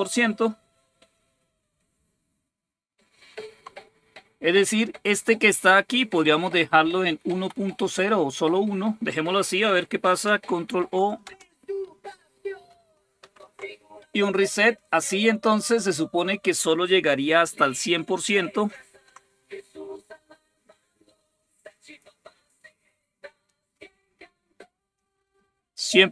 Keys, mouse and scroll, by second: 2.9 super+6, 4.6 Up, 4.9 Left, 6.2 Delete, 6.5 0, 6.9 Down, 7.1 Left, 7.6 Delete, 7.9 0, 10.5 ctrl+o, 11.1 Return, 13.0 ctrl+super+r, 18.5 super+8.